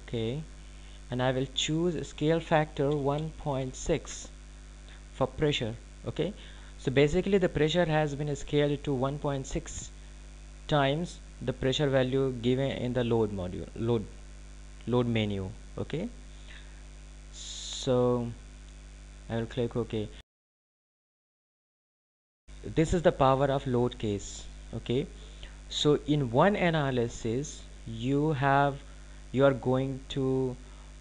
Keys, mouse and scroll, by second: 8.5 click, 20.5 click, 30.0 click.